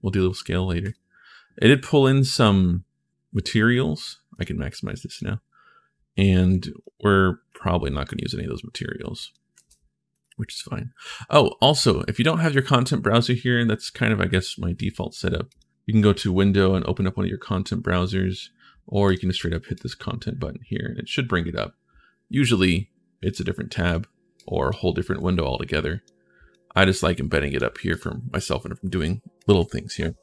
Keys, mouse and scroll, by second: 0.6 click, 4.1 click, 4.9 click, 6.3 click, 7.3 click, 9.3 ctrl+shift+s, 22.4 click, 23.7 click, 24.1 click, 25.0 click, 30.0 click.